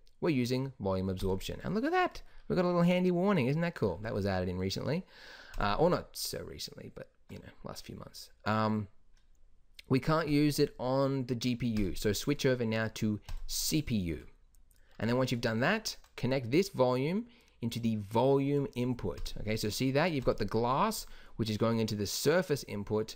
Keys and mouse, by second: 5.7-18.0 drag, 19.3-20.4 drag.